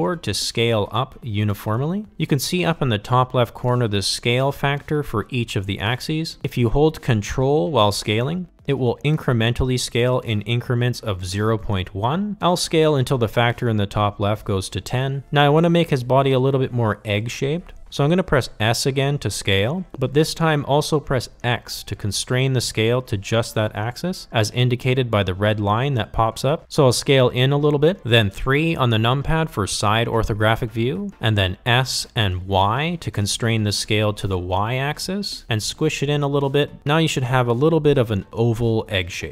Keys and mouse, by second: 15.3 s, 28.0 KP_3, 29.9 s.